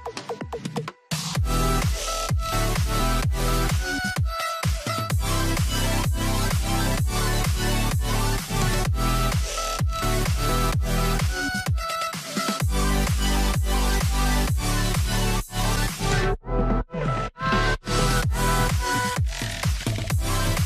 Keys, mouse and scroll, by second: 2.0 double click, 2.8 shift+m, 4.3 Return, 5.2 b, 5.6 right click, 6.2-6.6 scroll down 1, 7.3-8.1 scroll up 1, 10.6 double click, 12.8 alt+click.